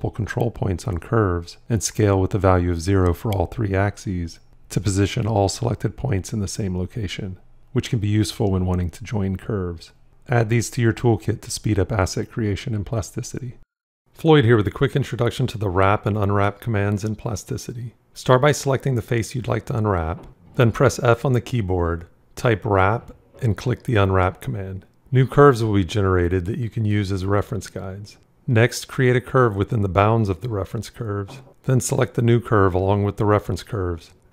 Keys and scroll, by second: 1.5 s, 9.8 j, 21.0 f.